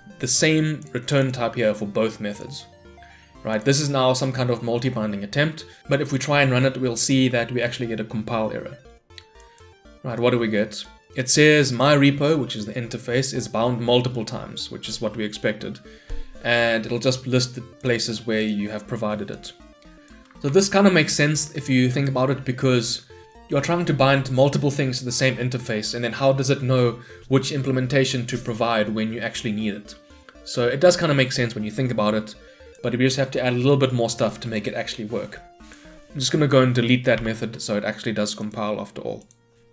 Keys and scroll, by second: 6.3 shift+F10, 20.5 shift+Escape, 37.2 Delete.